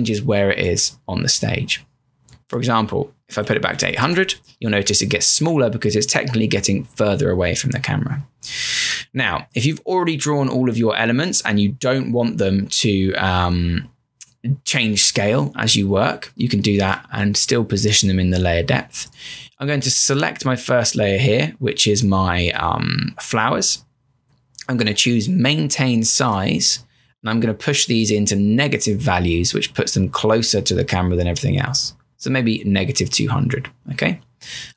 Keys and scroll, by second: 3.1-4.4 typing, 5.8 Return.